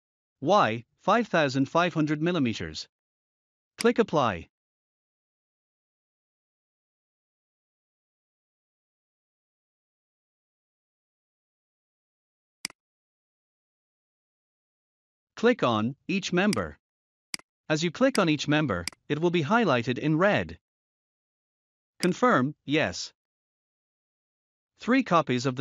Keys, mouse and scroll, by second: 3.8 click, 6.7 typing, 8.5-9.2 typing, 10.5 scroll down 1, 12.5 click, 16.4 click, 21.9 click, 23.6 click, 24.8-25.5 scroll down 1.